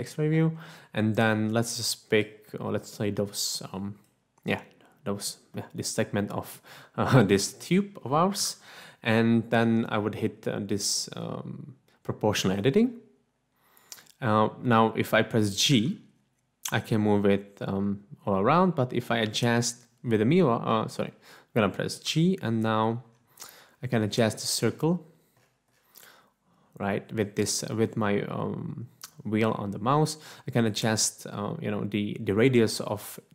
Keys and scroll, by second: 8.7 3, 15.7 g, 19.2 Escape, 22.9 g.